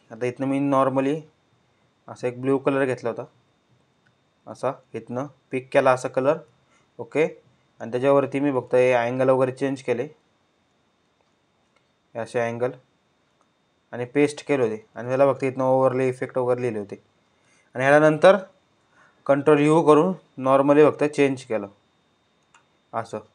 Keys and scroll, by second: 18.0 ctrl+u.